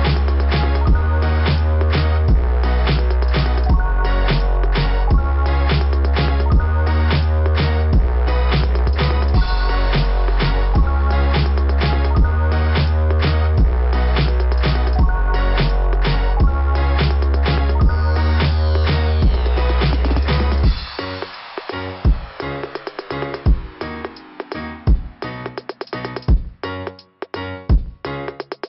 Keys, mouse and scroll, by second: 1.2 click, 3.1 click, 6.2 click, 11.9 typing, 15.5 click, 16.1 click, 17.5 click, 20.6 click, 20.9 click, 21.2 click, 21.5 click, 23.5 right click, 25.4 click, 26.3 right click, 28.0 click.